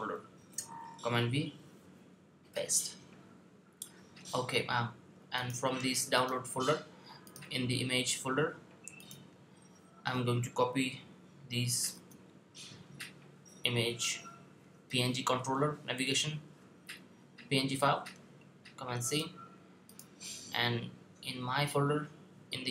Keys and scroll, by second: 0.2 super+v, 11.7 super+c.